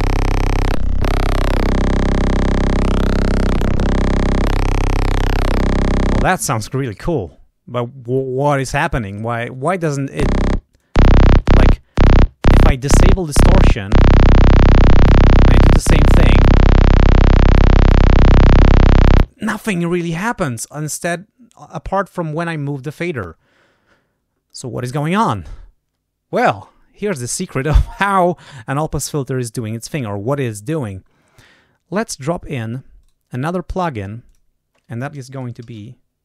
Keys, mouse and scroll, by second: 2.6-4.1 drag, 4.3-6.2 drag, 10.6 click, 14.3-15.7 drag, 16.3 click, 17.3 click, 18.5 click, 32.1 click, 32.9 right click, 34.2 click, 35.2-36.2 typing.